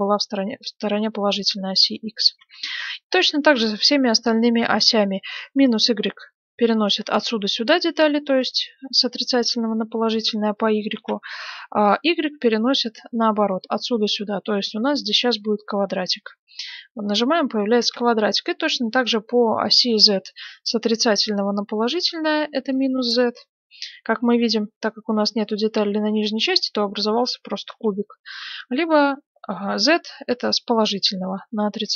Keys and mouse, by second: 2.3 ctrl+z, 6.2-10.9 drag, 10.9 ctrl+z, 16.0-18.5 drag, 17.0 middle click, 17.5 right click, 17.7 ctrl+z, 18.5-20.1 middle drag, 22.6-24.3 drag, 24.3-27.6 middle drag, 27.6 ctrl+z.